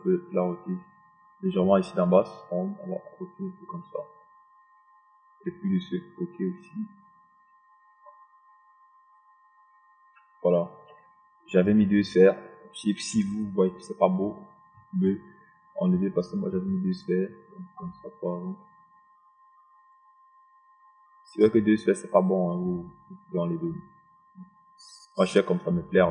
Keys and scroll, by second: 14.0 ctrl+d.